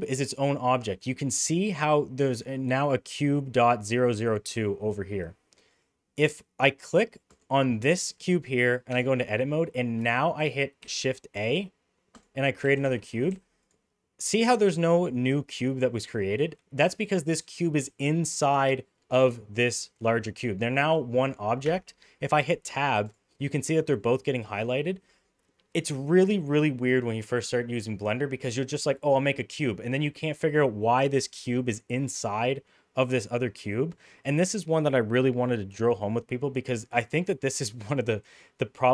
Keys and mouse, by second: 5.5 middle click, 8.8 Tab, 10.8 shift+a, 12.6 g, 21.6 Tab, 22.0 middle click, 22.7 click, 23.9-24.5 middle drag, 30.6 middle click, 32.4 middle click, 33.3-33.9 middle drag.